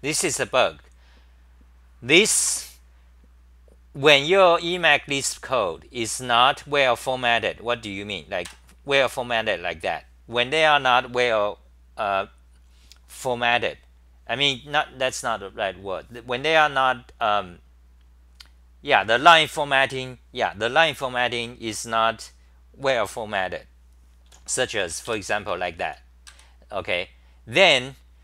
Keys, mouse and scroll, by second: 8.4 Tab, 24.4-26.3 typing.